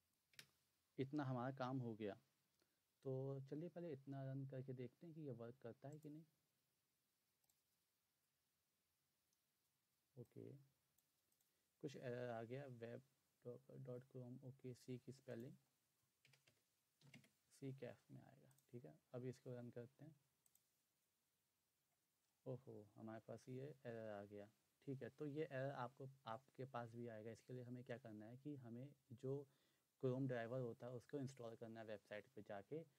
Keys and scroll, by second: 0.3 Return, 16.2 BackSpace, 17.0 c.